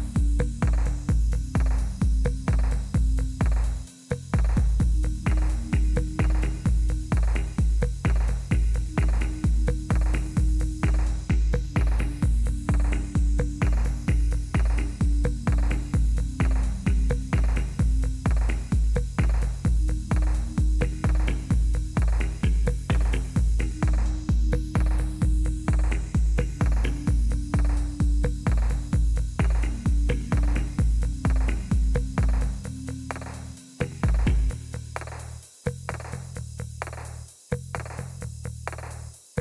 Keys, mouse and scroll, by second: 0.0-2.6 drag, 4.6-6.2 drag, 6.3-7.7 drag, 9.5 click, 11.2 right click, 12.6 click, 16.5 Return, 16.6 Return, 16.8 Return, 17.1 Up, 17.3 Up, 17.5-18.1 typing, 22.3-23.5 drag, 25.1-26.4 drag, 27.6-29.5 drag, 30.7 click, 32.0 click, 35.0 click, 35.3 click, 37.8 click, 39.2 click.